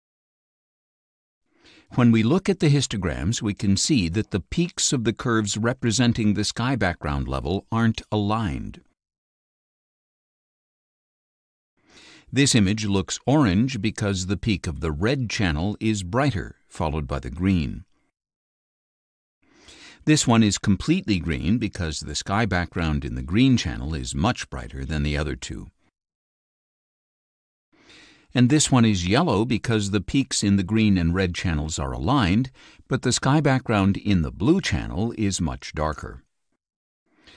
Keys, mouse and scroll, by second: 2.2 click, 3.9 click, 5.6 KP_5, 5.8 KP_0, 7.7 click, 8.9 click, 10.1 click, 11.8-20.1 drag, 28.2 click.